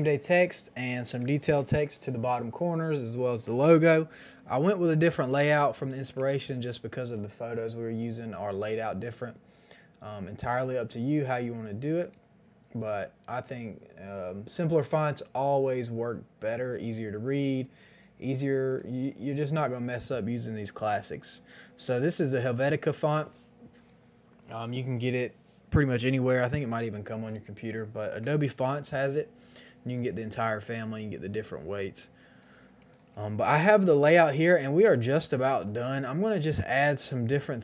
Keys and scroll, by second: 4.9 t, 6.0 Return, 33.2 space.